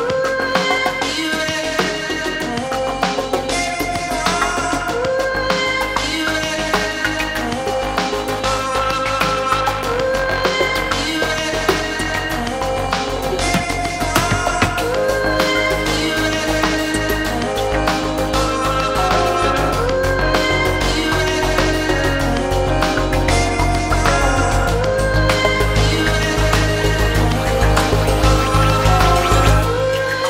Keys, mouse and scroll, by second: 0.0-0.5 shift+middle drag, 0.7-1.1 middle drag, 1.3-1.6 scroll down 1, 1.6-3.3 middle drag, 3.6 scroll down 1, 4.6-11.7 drag, 12.0-14.2 middle drag, 15.3 click, 17.3-19.2 middle drag, 20.1-22.7 drag, 23.0-23.6 middle drag, 25.0 click, 26.5-29.1 drag, 29.7-30.2 drag.